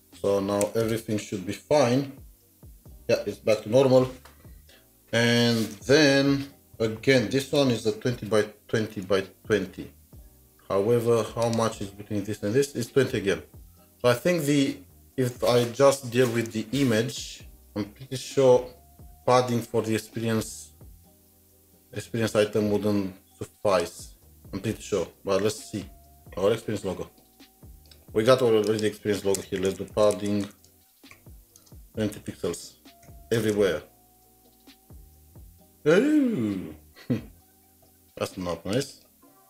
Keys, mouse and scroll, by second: 0.0-0.6 typing, 9.8 typing, 9.8 alt+Tab, 18.9 alt+Tab, 20.7 alt+Tab, 20.8 scroll up 1, 29.3 scroll up 1, 29.4 Return, 29.5-33.1 typing, 38.9-39.4 typing, 39.0 double click.